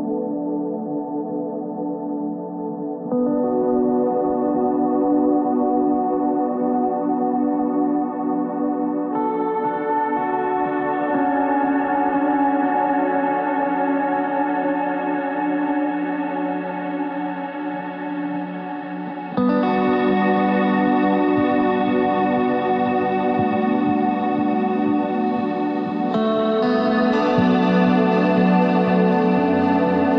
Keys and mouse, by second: 24.1 z, 24.9 Tab, 25.9 click, 27.0 KP_3.